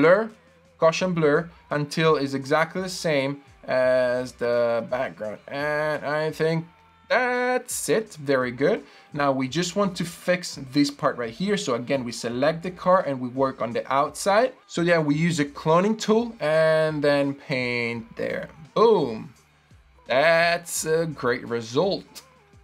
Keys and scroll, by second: 13.6 i, 18.2 super+d.